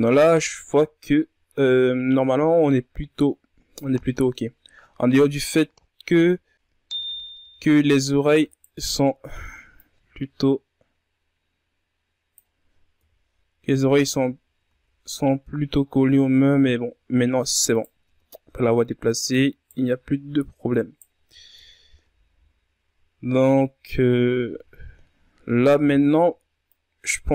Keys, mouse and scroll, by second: 5.3-7.2 ctrl+scroll up 2, 7.2-7.7 scroll up 1, 7.7 KP_3, 9.3 right click, 10.5-13.7 drag, 13.7 KP_1, 14.9-15.4 ctrl+scroll down 3, 15.4 a, 15.8 scroll down 2, 17.0-17.8 scroll up 3, 17.8 scroll down 1, 18.1-18.5 scroll up 1, 18.5 right click, 18.8 Tab, 19.5 right click, 21.1 right click, 21.9-22.3 scroll down 5, 22.3 Tab, 22.8 a, 23.0-23.8 scroll down 2, 23.8-24.8 scroll up 4, 24.8-25.4 scroll down 2, 25.4-26.2 scroll up 7, 26.2 Tab, 26.8-27.3 ctrl+scroll down 3.